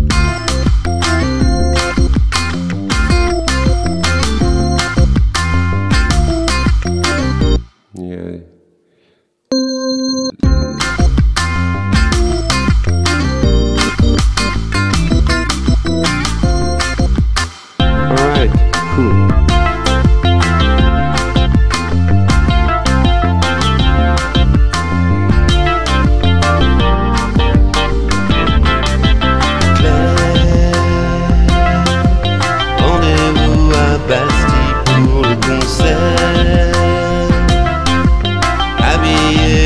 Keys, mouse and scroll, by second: 7.6 space, 9.5 click, 10.5 space, 17.5 space, 17.9 alt+Tab.